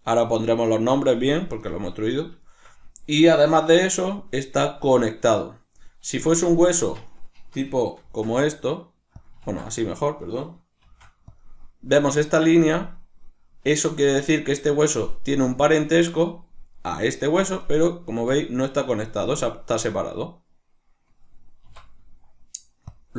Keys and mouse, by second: 2.4-6.5 shift+middle drag, 6.5 right click, 6.8 Tab, 9.2 click, 9.4 ctrl+z, 9.8 right click, 10.8 shift+d, 11.4 click, 16.7 right click, 17.7 right click, 21.7 x.